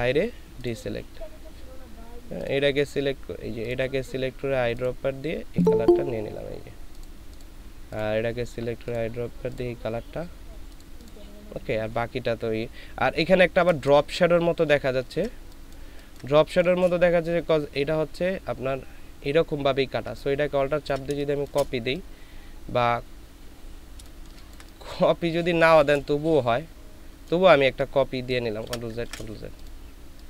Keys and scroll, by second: 14.0 ctrl+space, 15.8 ctrl+space, 21.1 alt+space, 24.0 ctrl+space, 28.6 ctrl+z, 29.0 ctrl+z.